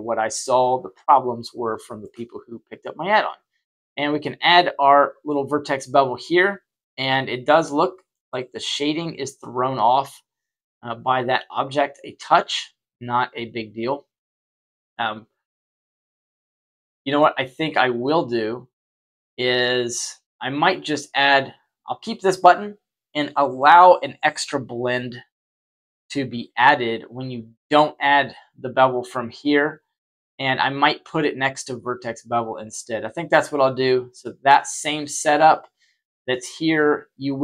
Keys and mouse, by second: 0.5-1.9 shift+middle drag, 3.7 click, 5.7-8.0 middle drag, 10.2-14.1 shift+drag, 15.5-17.1 middle drag, 17.9 click, 20.4 click.